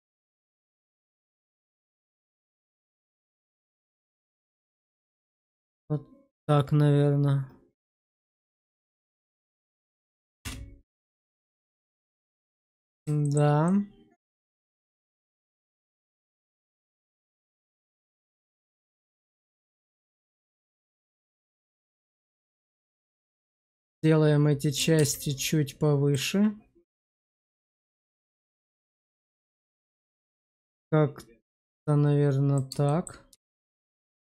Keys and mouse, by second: 0.4 middle click, 2.5 shift+middle click, 4.8 click, 8.3 click, 9.9 click, 10.5 space, 11.0 shift+middle click, 11.7-13.0 middle drag, 13.1 shift+middle drag, 13.6-14.3 middle drag, 14.5 shift+middle drag, 14.9-17.5 middle drag, 17.9 shift+middle click, 19.2 q, 20.5 click, 21.0 alt+middle click, 22.1 shift+middle drag, 22.7 shift+middle drag, 23.1 Tab, 23.5 shift+middle click, 24.9 alt+q, 25.3 click, 27.0 click, 32.8 shift+middle click, 33.2 Tab, 33.8 shift+z.